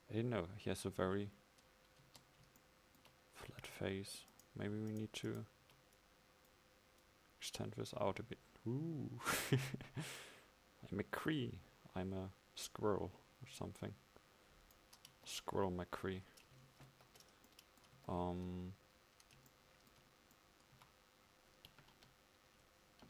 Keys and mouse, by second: 2.1 Tab, 15.2 Tab, 17.0 ctrl+z, 18.1 Tab, 20.8 a, 22.0 KP_1.